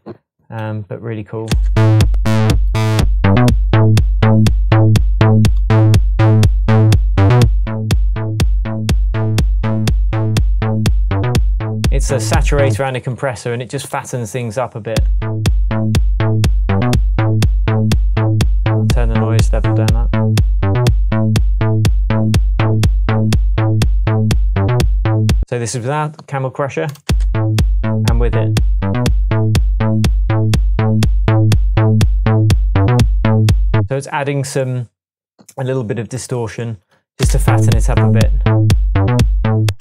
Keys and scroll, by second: 1.5 space, 12.7 space, 14.9 space, 25.4 space, 27.1 space, 33.8 space, 37.2 space, 39.7 space.